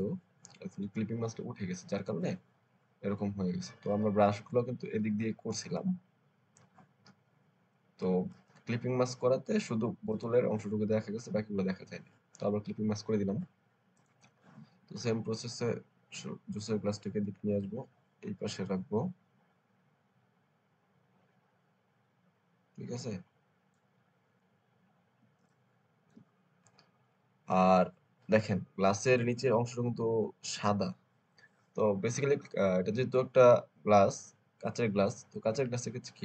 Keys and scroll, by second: 25.3 alt+space, 26.5 alt+space.